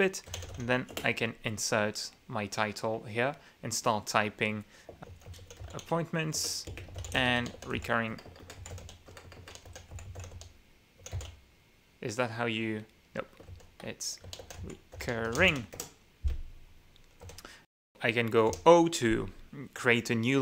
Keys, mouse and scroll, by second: 0.1-1.1 typing, 5.0-12.1 typing, 6.8 Return, 13.9 ctrl+w, 14.6-16.4 typing, 18.8 o.